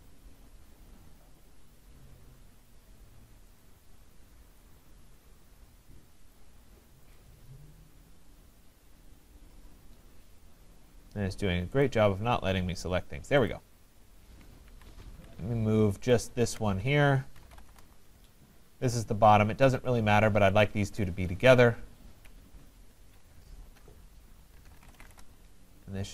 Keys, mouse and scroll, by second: 3.6 click, 4.6 click, 6.4 click, 7.2 click, 11.8 click, 13.5 click, 14.7 Escape, 16.1 ctrl+click, 17.2-18.5 typing, 19.9 click, 21.1 click, 22.1-22.9 typing, 24.3-25.6 typing.